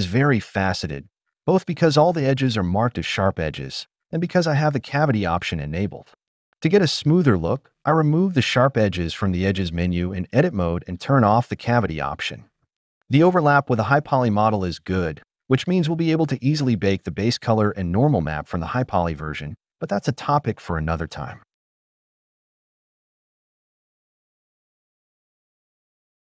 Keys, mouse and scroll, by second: 0.0 alt+click, 1.3 Tab, 2.0 click, 2.2-3.1 right drag, 4.0 Tab, 4.4 a, 5.3 ctrl+e, 7.0 Tab, 10.4-12.2 drag, 12.4 middle drag, 18.4 click, 20.5 click, 22.1 click.